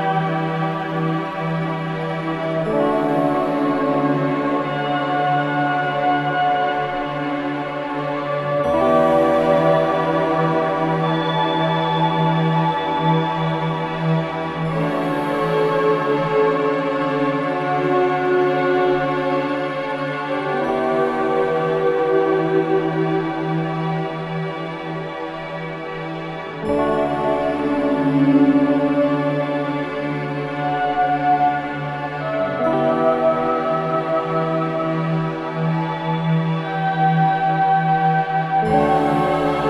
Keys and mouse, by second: 0.0 click, 1.1 click, 3.7 click, 5.0-7.9 drag, 10.2 click, 11.5-13.2 drag, 14.8 click, 16.3 click, 17.0 click, 18.8-19.8 drag, 20.2 click, 21.5 click, 24.6 ctrl+s, 25.8 click, 26.6 click, 28.4-34.3 drag, 34.3-36.9 middle drag, 37.2 click, 38.0 click, 38.7 click.